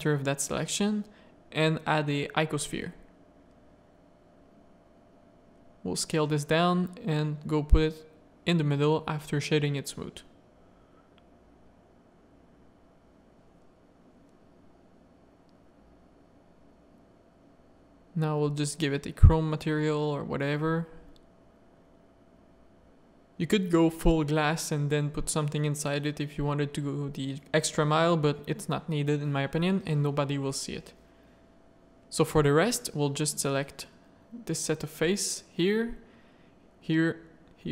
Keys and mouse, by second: 0.8 shift+a, 2.4 s, 3.4 s, 5.6 middle click, 7.2 right click, 8.8 click, 10.0 z, 10.5-11.1 middle drag, 14.5 alt+a, 14.6 z, 21.2 click, 24.1 middle drag, 27.0 z, 27.4 click, 27.8 z, 28.2 click, 28.7 Tab, 28.9 z, 29.1 middle click, 29.6 3, 30.2 middle click, 35.7 shift+click, 36.4 shift+click.